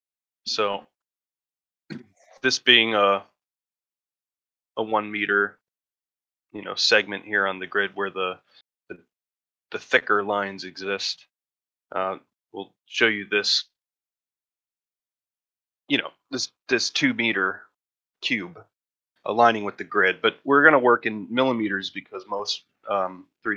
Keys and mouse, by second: 0.0-0.3 ctrl+middle drag, 0.4 ctrl+middle drag, 1.1 shift+middle drag, 7.9 shift+middle drag, 10.9 shift+middle drag.